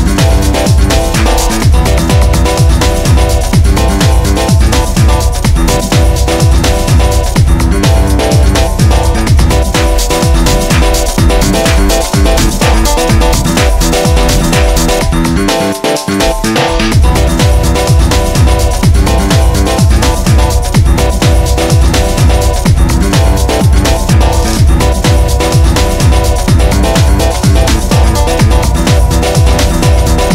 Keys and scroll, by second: 7.0 ctrl+d, 7.3 Escape, 11.5 ctrl+d, 11.7 Escape, 15.1 3, 16.1 ], 19.7 4, 27.7 9, 28.1 Return, 29.1 3, 29.3 Return, 29.7 1, 29.9 ..